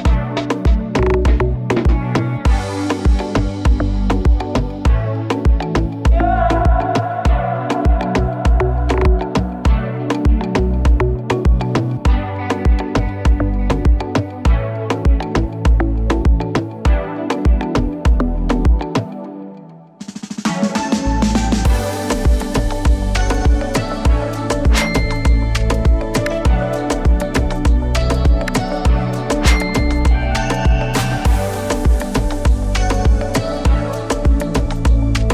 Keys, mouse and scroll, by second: 1.8-5.1 drag, 7.9 ctrl+s, 8.3 0.